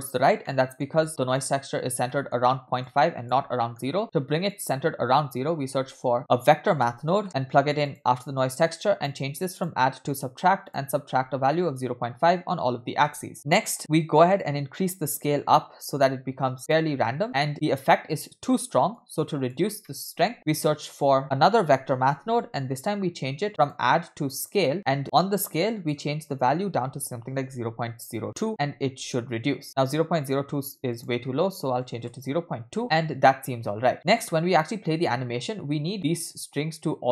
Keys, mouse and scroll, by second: 0.5-0.8 middle drag, 1.4 click, 1.8-2.1 scroll up 2, 2.1 middle click, 2.8 click, 3.7 middle click, 4.0 shift+a, 8.8 click, 9.6-10.9 drag, 11.4-13.3 shift+drag, 13.3 middle click, 13.3-13.8 scroll down 2, 13.8-14.4 scroll up 4, 14.4 scroll up 1, 14.4-16.8 drag, 17.2-18.9 scroll down 1, 18.9 scroll down 2, 19.0 click, 19.9 middle click, 20.2 scroll down 2, 20.3 shift+a, 24.1 click, 24.7 click, 25.8-28.0 drag, 28.5 scroll up 3, 28.9-29.2 shift+middle drag, 29.3-30.1 scroll up 2, 30.1 scroll up 2, 31.0-32.2 drag, 32.9-33.5 scroll down 2, 34.0 scroll down 2, 34.0 space, 35.7 space, 35.9 space, 36.3 space, 36.3 space.